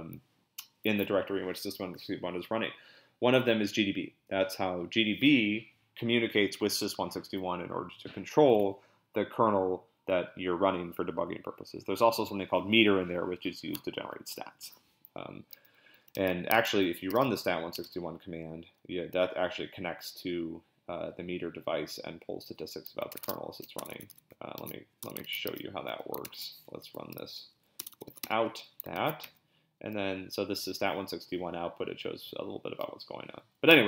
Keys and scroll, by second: 15.9-17.8 typing, 23.1 ctrl+a, 23.2-25.5 typing, 24.6 ctrl+x, 25.2 ctrl+b, 26.2 ctrl+c, 26.7 Up, 26.8 Left, 27.0 Left, 27.1 Left, 27.3 Left, 27.4 Left, 27.5 Left, 27.8 BackSpace, 27.9 BackSpace, 28.1 BackSpace, 28.2 Return, 28.9 ctrl+b, 29.2 n.